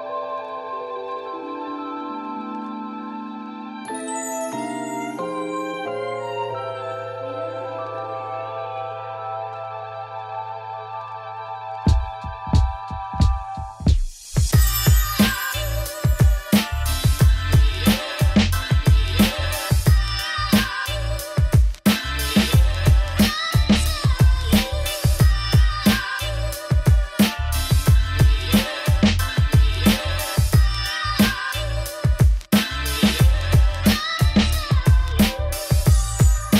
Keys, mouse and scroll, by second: 0.0 shift+click, 1.3 shift+click, 1.6 ctrl+l, 2.7-3.8 drag, 4.0-5.4 drag, 5.6 click, 6.6 middle click, 7.0-8.8 scroll up 1, 8.8 scroll up 1, 8.9-10.1 middle drag, 10.1 click, 11.1 right click, 11.9 click, 12.4-13.1 scroll down 2, 13.1 scroll up 2, 13.2 click, 13.4 right click, 13.7 click, 14.0-15.2 middle drag, 16.2 click, 17.2 scroll down 1, 17.3 g, 19.2 middle click, 19.6-21.0 right drag, 21.0 middle click, 21.4 click, 21.6-22.2 scroll down 2, 21.7 middle click, 22.2 click, 22.6 ], 22.6 ], 22.9 x, 23.8-24.9 drag, 24.9 shift+middle click, 25.1-25.6 scroll up 2, 25.6 ctrl+l, 26.2-28.4 drag, 28.5-30.7 right drag, 30.7-32.0 middle drag, 32.0 click, 32.1 scroll down 1, 32.3 middle click, 32.7 ], 33.0 shift+middle click, 33.3 alt+d, 34.3 click, 34.5 r, 35.6 middle click, 36.0 g.